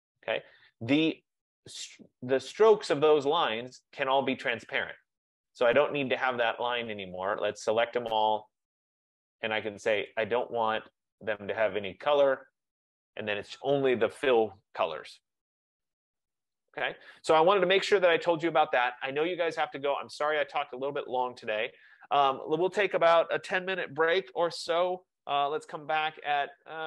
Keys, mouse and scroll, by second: 0.4 click, 2.2 click, 8.3 click, 10.2 click, 11.3 click, 12.8 click, 13.8 F15.